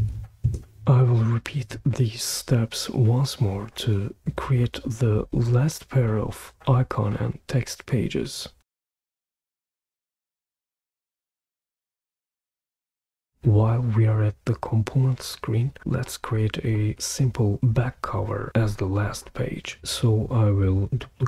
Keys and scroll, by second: 0.4 Return, 8.9 super+d, 8.9-11.0 typing, 11.1 Return, 11.3 super+v, 11.7 super+v, 11.8 Return, 12.0 super+d, 12.8 typing, 12.8 Return.